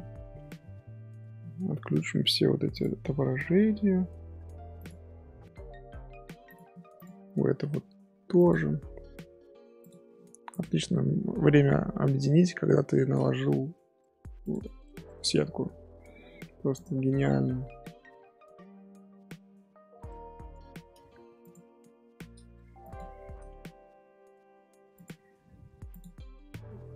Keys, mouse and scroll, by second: 2.7 click, 4.7 click, 5.1 scroll down 1, 5.1-6.4 scroll up 1, 6.4 click, 6.9 click, 8.4 click, 9.8 click, 10.5 click, 10.8-12.5 middle drag, 12.5 scroll down 1, 13.4 Tab, 14.0 middle click, 14.2 Tab, 14.4 click, 14.8-16.4 middle drag, 16.4 Tab, 16.7 click, 17.1-21.0 middle drag, 21.0 g, 21.8-22.8 middle drag, 22.8 shift+click, 24.9 click.